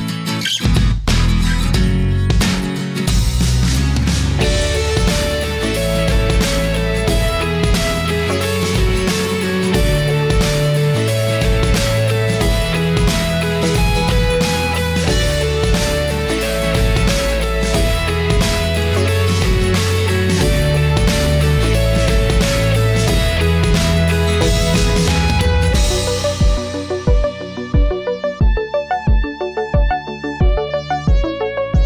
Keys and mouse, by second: 6.7-7.7 middle drag, 8.5-9.2 middle drag, 9.2 right click, 10.4-12.0 right drag, 13.6 middle click, 15.6 click, 17.0-21.3 middle drag, 23.1-27.2 middle drag, 29.1 middle click, 31.7 click.